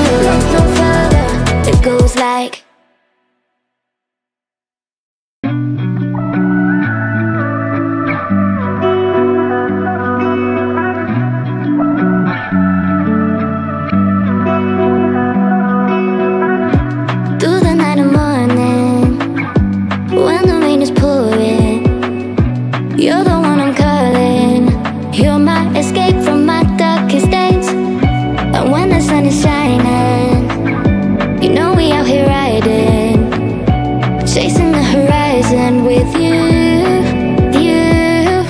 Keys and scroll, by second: 32.0 o.